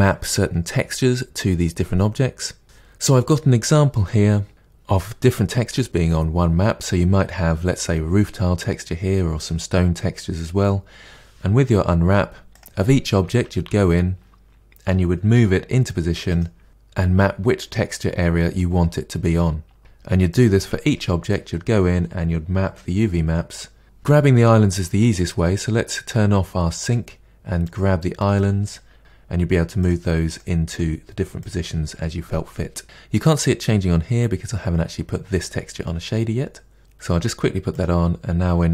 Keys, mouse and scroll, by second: 12.5 click, 13.2 Tab, 13.6 a, 15.3 g, 19.8 Tab, 20.3 click, 20.8 Tab, 23.8 a, 28.2 click, 29.0 g, 30.3 click, 30.7 g, 36.8 click, 37.7 click.